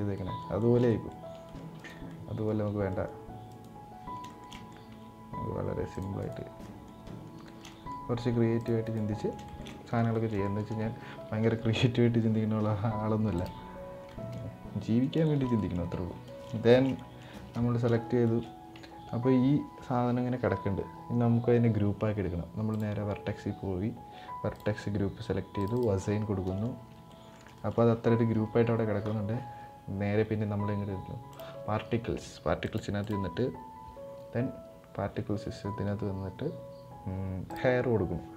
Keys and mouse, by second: 0.3 shift+middle click, 0.6 middle click, 1.8 middle click, 2.3 c, 4.0 shift+middle drag, 4.3 middle click, 4.6 c, 6.3 middle drag, 7.2 shift+middle click, 7.4 middle click, 7.9 c, 9.2 shift+middle click, 9.4 middle click, 9.8 shift+middle click, 10.1 middle click, 11.1 z, 13.8 middle click, 14.9 shift+middle click, 15.3 middle click, 15.5 Tab, 16.0 middle drag, 16.4 shift+middle click, 16.6 middle click, 17.9 shift+middle click, 18.4 Tab, 22.4-23.3 drag, 24.3-25.4 drag, 26.1 middle click, 26.5 Tab, 26.8 middle click, 27.3 shift+middle click, 31.0 drag, 32.3 click, 32.7-34.0 drag, 37.3 click.